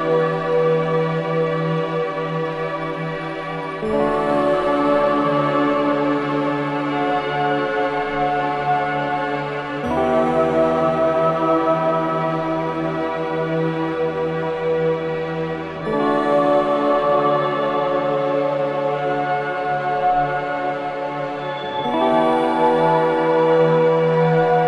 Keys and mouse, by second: 1.7 click, 4.5 click, 6.5 click, 9.0-11.5 shift+drag, 12.4 alt+a, 13.0 ctrl+alt+click, 16.5 ctrl+s, 18.2 click, 19.6-21.9 drag, 22.4-24.0 ctrl+alt+drag.